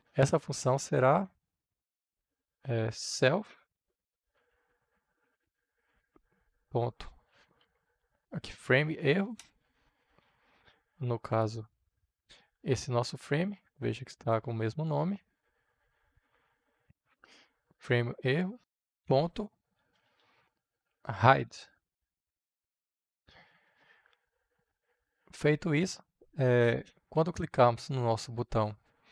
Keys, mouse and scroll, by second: 2.4 s, 2.7 e, 3.9 l, 4.2 f, 5.3 shift+., 5.9 Return, 6.4-8.0 typing, 9.2 Return, 11.2-18.9 drag, 18.9 >, 19.8 h, 21.1-22.7 typing, 24.3 click, 25.2 ctrl+s.